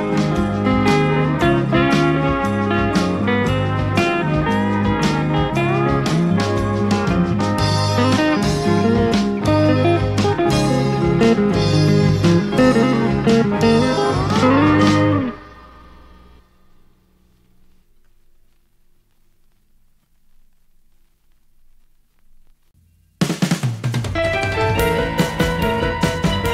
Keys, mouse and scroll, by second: 3.5-5.7 drag, 6.9-8.2 drag, 8.6 BackSpace, 9.8-12.1 drag, 12.3 shift+space, 15.7-18.6 drag, 18.8 shift+space, 21.6 click, 23.3-25.3 drag, 25.4 shift+space.